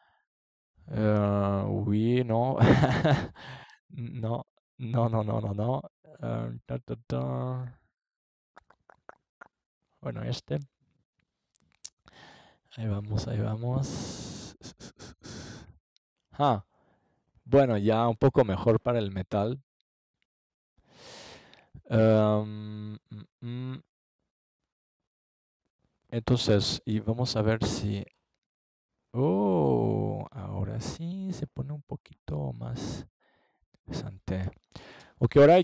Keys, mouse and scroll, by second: 2.8 ctrl+s, 4.5-6.3 drag, 6.4 click, 8.4 KP_0, 13.8-14.8 middle drag, 15.1 middle click, 16.9 click, 18.1 click, 22.0 click, 23.2 click, 23.4 middle click, 24.4-25.9 drag, 33.5-35.1 drag, 35.3 click.